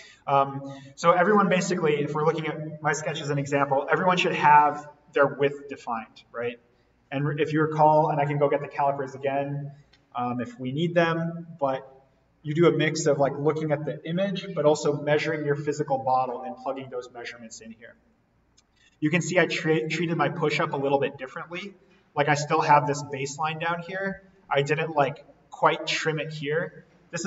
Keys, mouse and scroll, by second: 1.5-1.9 scroll down 1, 6.4-9.7 drag, 17.8-18.3 scroll up 1, 18.3-19.1 scroll down 1, 23.3-25.1 drag, 25.1-26.0 scroll down 1.